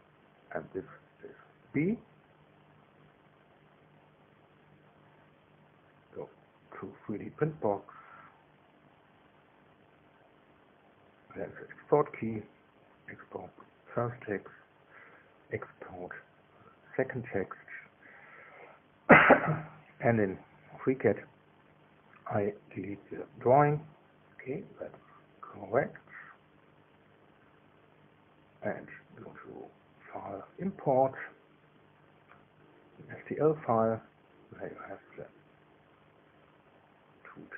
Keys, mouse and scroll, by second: 0.4 shift+Return, 2.0 right click, 2.8 click, 3.6 shift+b, 4.6 Return, 5.8 right click, 9.2-14.1 drag, 15.0 right click, 16.2 click, 20.8 click, 23.4 click, 24.5 scroll down 1, 25.8 click, 26.6 click, 27.0 click, 28.0 Delete, 29.8 click, 32.2 click, 35.6 click, 36.2 shift+click.